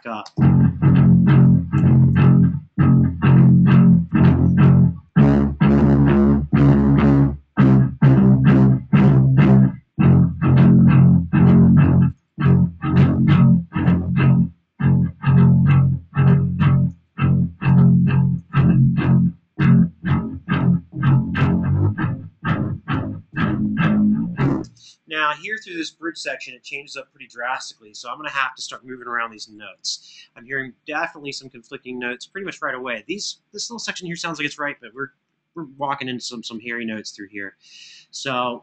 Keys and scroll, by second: 1.3 super+], 1.5 super+], 10.3 super+[, 13.6 super+c, 16.8 super+c, 18.1 super+v, 24.4 space, 29.6 alt+f.